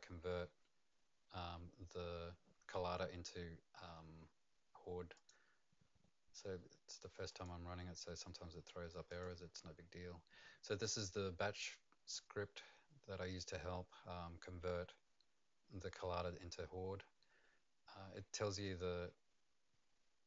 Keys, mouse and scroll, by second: 5.1 click, 7.3 click, 9.1 click.